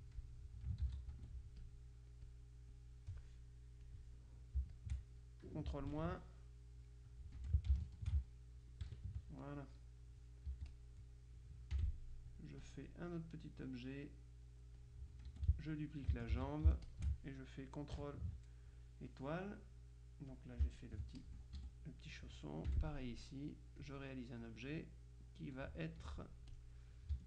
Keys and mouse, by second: 0.9 ctrl+z, 1.3 ctrl+F2, 1.7 ctrl+click, 2.4 click, 3.9 click, 4.9-5.9 shift+drag, 6.1 ctrl+KP_Subtract, 7.5 F1, 7.9 shift+click, 8.9 ctrl+KP_Subtract, 10.6 z, 10.8 click, 11.9 F6, 12.7 click, 13.7-15.4 drag, 15.4 F2, 15.5 click, 16.5 ctrl+d, 16.9 ctrl+shift+click, 20.4-21.8 drag, 21.7 shift+F1, 22.7 F6, 23.3-24.4 drag, 26.1 F2, 26.1 click, 26.6 click.